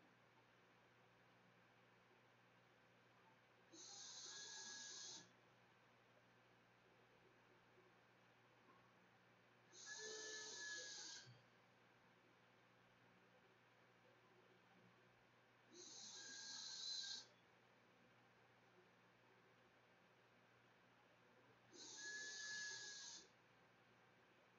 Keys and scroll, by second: 11.0 space, 12.1 shift+Return, 12.2 shift+], 12.6 shift+[, 13.0 ], 13.4 Return, 13.8 Return.